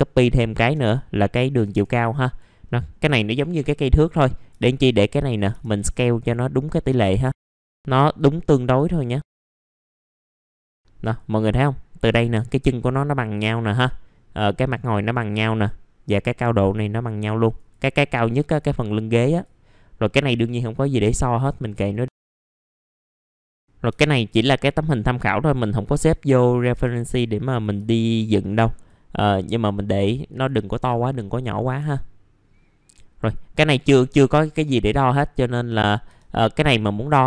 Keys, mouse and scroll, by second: 1.3 middle click, 1.4 scroll down 1, 2.2 click, 2.6 middle click, 4.0-7.7 drag, 7.7 scroll up 1, 8.1-10.2 drag, 10.2 w, 10.3-11.9 drag, 16.6 scroll down 1, 17.0 middle click, 17.5-20.0 drag, 20.0 middle click, 20.2-20.8 scroll down 1, 20.8 middle click, 21.4 click, 21.9 scroll up 1, 22.1-22.7 typing, 22.2 click, 23.3 scroll up 1, 23.5-26.5 drag, 26.5 scroll up 1, 26.7 typing, 27.1 click, 29.1-29.6 scroll down 1, 29.6 middle click, 30.3-33.7 drag, 34.4 middle click, 36.6-37.2 drag.